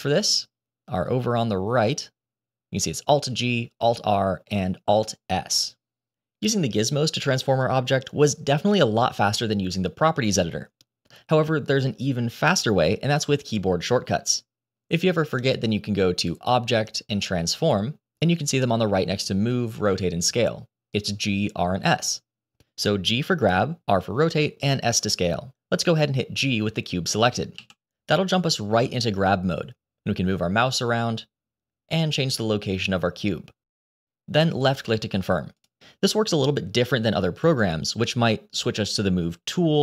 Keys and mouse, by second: 0.1-5.3 drag, 16.1-21.9 drag, 27.5 g.